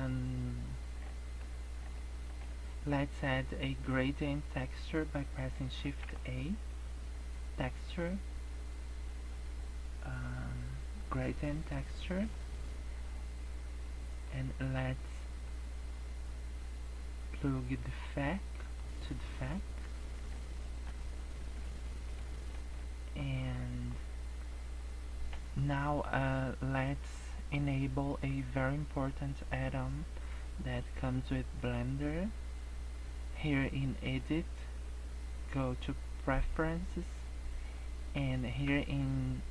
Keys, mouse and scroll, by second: 1.1 shift+middle click, 1.7 scroll down 3, 1.9 shift+middle click, 2.5 scroll up 2, 5.8 shift+a, 13.8 click, 15.6 click, 19.5 scroll up 2, 20.6 shift+middle click, 21.0 scroll down 4, 21.6 shift+middle click, 22.4 shift+middle click, 23.7-24.3 scroll up 5, 24.6-25.5 scroll down 2, 36.6 click.